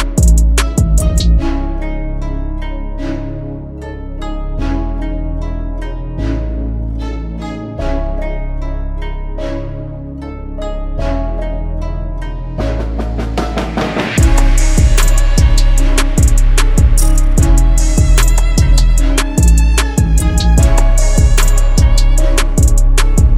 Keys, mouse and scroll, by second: 20.5 alt+click.